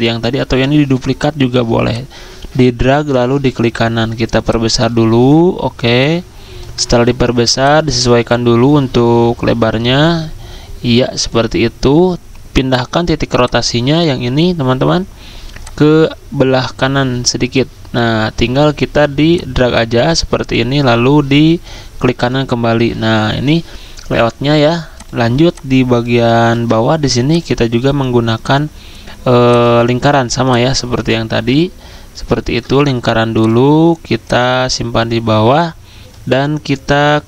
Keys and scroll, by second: 26.4 ctrl+z.